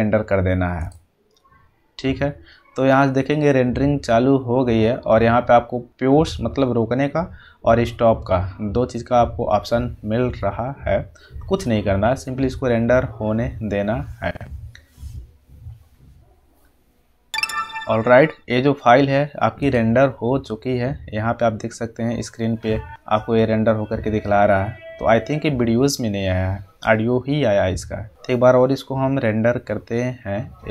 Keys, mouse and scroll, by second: 0.8 click, 2.9 click, 3.3 click, 19.5 click, 19.7 click.